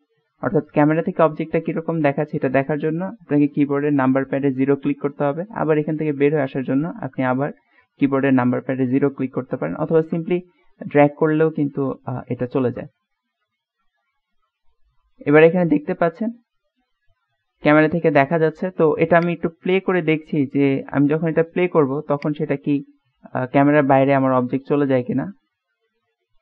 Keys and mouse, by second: 6.5 KP_0, 9.1-9.5 drag, 9.5 middle click, 10.2 KP_0, 10.8-12.7 middle drag, 12.8 KP_0, 19.3-21.6 drag, 22.3 click.